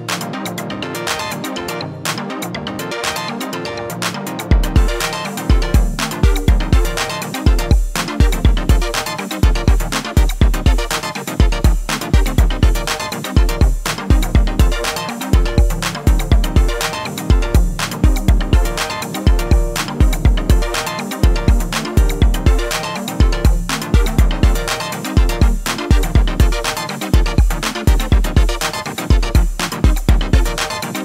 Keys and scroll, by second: 9.2 shift+d, 13.1 p, 21.6 e, 25.5 1, 26.4 3, 27.1 a, 29.4 1.